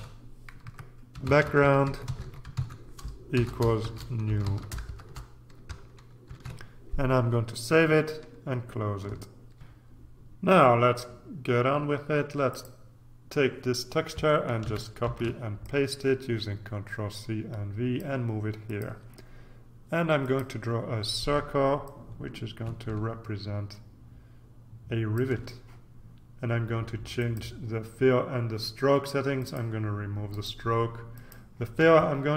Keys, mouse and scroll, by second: 0.0-5.3 typing, 6.3 ctrl+s, 9.6 ctrl+r, 12.5 click, 14.6 ctrl+c, 15.0 ctrl+v, 15.6-18.6 ctrl+drag, 18.6 click, 20.2 click, 21.8-25.7 ctrl+drag, 27.2 click, 29.3 click, 30.3 click, 31.1 click.